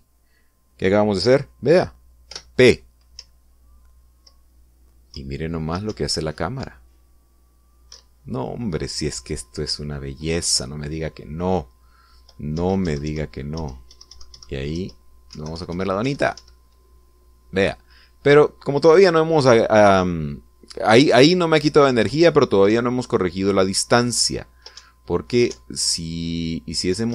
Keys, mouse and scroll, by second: 3.0 p, 3.9 Up, 5.8 Left, 6.6 Up, 8.6 Left, 13.3 Up, 15.4 Left, 16.1 Right, 16.8 Up, 21.6 Down, 22.8 Left, 23.4 Up, 24.9 Left, 25.5 Right, 26.2 Up.